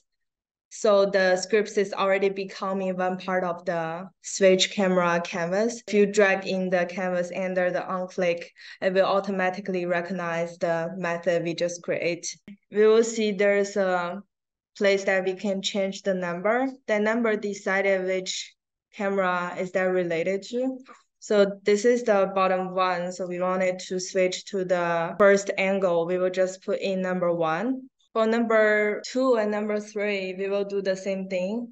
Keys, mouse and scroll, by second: 0.5 click, 12.4 click, 27.3 click, 28.9 click.